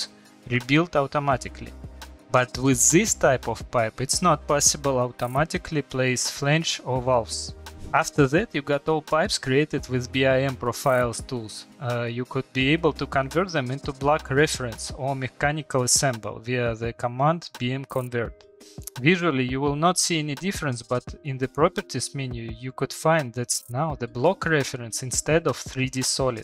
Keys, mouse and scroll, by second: 0.1 click, 0.9 click, 1.5 click, 3.8 click, 7.5 Escape, 8.0 click, 8.0-11.0 typing, 11.0 click, 11.4 click, 11.6 click, 11.9 click, 12.3 click, 12.8 click, 13.0 click, 13.6 click, 14.5 click, 14.8 BackSpace, 18.2 click, 20.0 Return, 21.2 Return, 22.1 Return, 22.5 Return, 24.5 click, 24.8 click, 25.7 click.